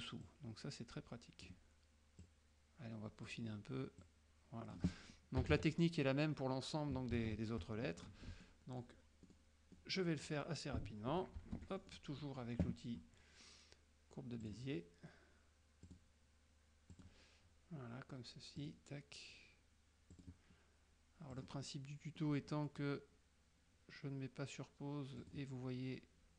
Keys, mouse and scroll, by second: 0.3-1.7 drag, 2.3-3.6 drag, 4.1 click, 5.5 KP_Subtract, 7.1 KP_Subtract, 8.5 middle click, 9.3 click, 9.9 click, 11.6 shift+F6, 11.9 shift+click, 12.3 shift+click, 12.3 shift+middle click, 14.5 click, 15.9 click, 17.0 click, 18.7 click, 20.3 click, 21.4 click, 21.8-22.5 middle drag, 21.8 scroll up 1, 25.3 click.